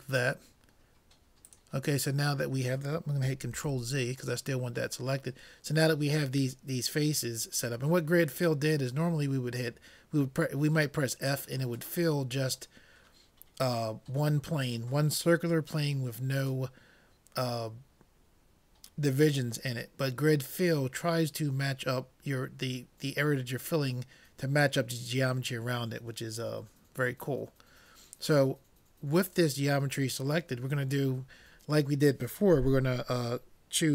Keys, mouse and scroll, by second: 1.5-3.2 drag, 3.6 ctrl+z.